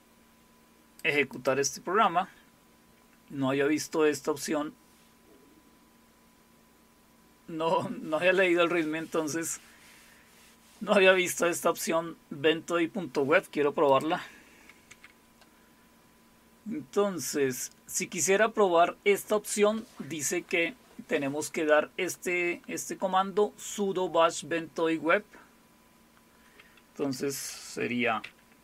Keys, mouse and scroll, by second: 1.3 click, 3.0-4.0 scroll up 2, 4.3-5.0 scroll up 2, 5.3-6.2 scroll up 2, 13.9 click, 14.9 q, 16.0-16.6 scroll up 1, 22.1-23.7 drag, 24.2 scroll down 2, 25.2-25.7 scroll down 2, 25.7 scroll down 1, 26.3-26.6 scroll down 1, 27.8-28.6 typing.